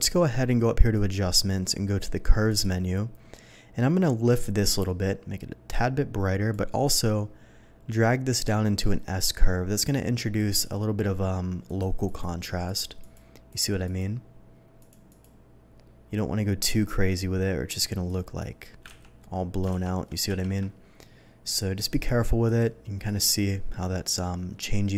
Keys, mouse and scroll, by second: 0.9 click, 2.5 click, 4.3-6.5 drag, 7.9-10.4 drag, 11.6 click, 12.0 click, 12.6 click, 13.0 click, 13.5 click, 13.8 click, 14.8 click, 15.1 click, 18.1 click, 18.8 ctrl+z, 19.7 ctrl+shift+z, 20.2 ctrl+z, 21.4 click, 21.9 click, 22.4 click, 23.0 click.